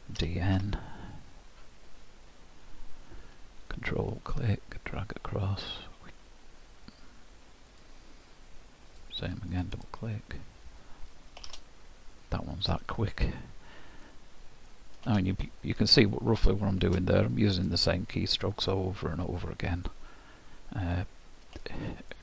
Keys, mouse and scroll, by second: 0.2 d, 3.7 ctrl+click, 11.5 shift+z, 12.1 middle click, 13.0-14.1 scroll down 3, 14.1 middle click, 16.1 shift+middle click, 21.6 shift+middle click.